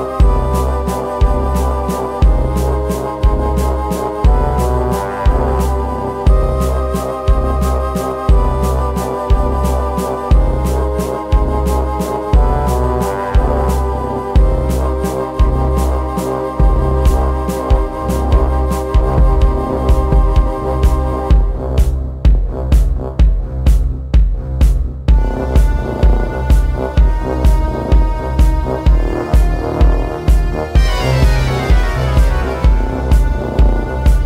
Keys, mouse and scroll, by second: 0.0 right click, 1.2 Tab, 1.2-6.1 typing, 1.4 ctrl+r, 3.4 middle click, 4.0 Tab, 4.2 click, 4.4 right click, 5.2 click, 5.5 middle click, 5.7 click, 6.5 click, 6.8 click, 7.2 middle click, 7.5 s, 7.7 click, 8.2 KP_7, 9.0 ctrl+1, 9.2 shift+d, 9.7 s, 10.1-11.7 middle drag, 11.5 right click, 11.7 click, 12.0 right click, 12.4 Tab, 12.6 ctrl+r, 12.9 ctrl+z, 13.2 ctrl+r, 13.9 Tab, 14.3 KP_7, 15.5 ctrl+s, 16.0 alt+F3, 16.0 n, 17.2 middle click, 17.3 z, 17.8 z, 23.0 space, 24.4 click, 24.8 middle click, 25.0 Tab, 25.2 right click, 25.5 shift+space, 26.4-27.7 middle drag, 27.7 shift+space, 27.8 click, 28.1 a, 29.5 middle click, 30.1 s, 31.0 z, 31.3 right click, 31.5 z, 31.8 click, 32.2 click, 32.4 click, 32.9 click, 34.0 click, 34.0-34.2 typing.